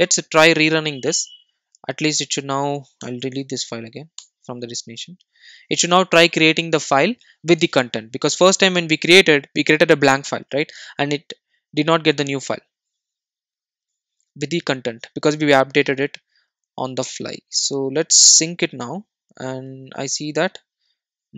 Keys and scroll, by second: 0.9 super+r, 3.1 Delete.